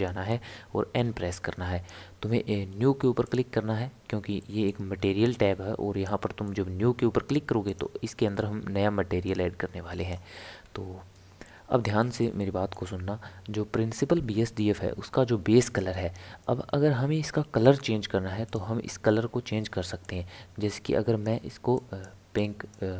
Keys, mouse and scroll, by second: 0.9 n, 3.2-4.4 drag, 4.4 middle click, 4.9-6.1 scroll up 7, 6.1-7.7 middle drag, 7.7 click, 9.3-10.6 drag, 10.6 scroll up 1, 10.7-11.0 scroll down 1, 11.3 scroll up 2, 11.5 scroll down 1, 12.0-15.4 shift+middle drag, 18.5 click.